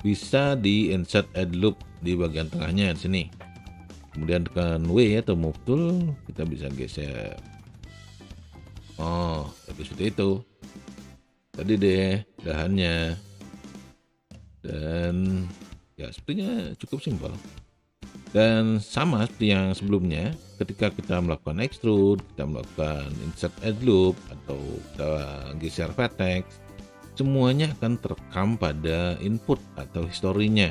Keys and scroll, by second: 5.1 w.